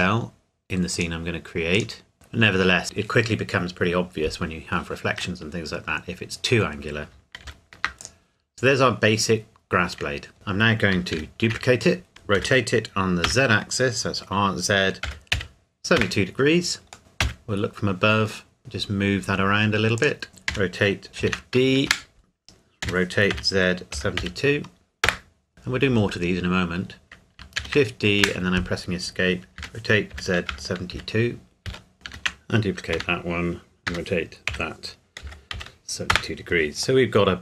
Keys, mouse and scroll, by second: 0.9 click, 2.1 Tab, 2.2 middle click, 5.4 middle click, 6.7-7.1 scroll down 1, 7.5 ctrl+s, 8.0 click, 10.3 KP_1, 11.1 shift+d, 12.1 Escape, 12.4 r, 13.3 z, 15.1 KP_7, 15.3 KP_2, 16.0 KP_Enter, 17.0 middle click, 17.2 KP_7, 18.3-18.6 scroll up 1, 18.6 g, 20.0 click, 20.5 r, 21.1 Escape, 21.2 shift+d, 21.9 Escape, 22.8 r, 23.3 z, 23.9 KP_7, 24.2 KP_2, 25.1 KP_Enter, 25.5 click, 27.6 shift+d, 28.2 Escape, 29.6 r, 30.1 z, 30.5 KP_7, 30.9 KP_2, 31.7 KP_Enter, 31.9 Escape, 32.1 shift+d, 32.9 Escape, 33.9 r, 34.5 z, 35.2 KP_7, 35.5 KP_2, 36.1 KP_Enter, 37.0 middle click.